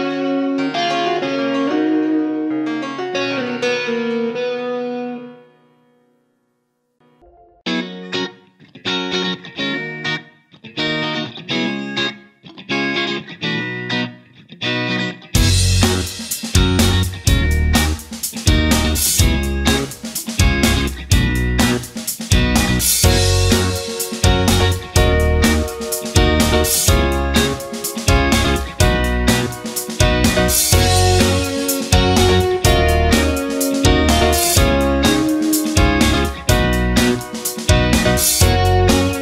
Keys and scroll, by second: 0.6 shift+F2, 14.7 space, 16.7 ctrl+z, 20.0 ctrl+g, 20.4 ctrl+space, 26.1 ctrl+z, 26.6 ctrl+space.